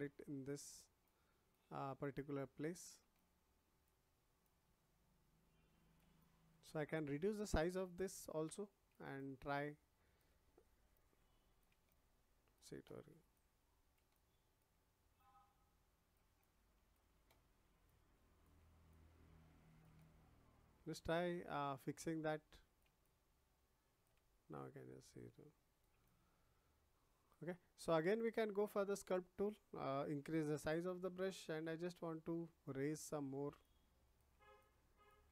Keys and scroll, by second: 30.5 ].